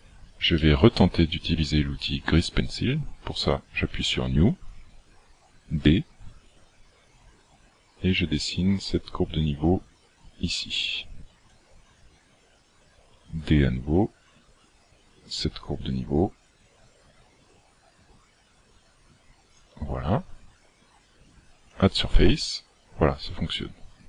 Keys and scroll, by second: 6.4 d, 11.6-12.0 d, 13.2 d, 19.7 d.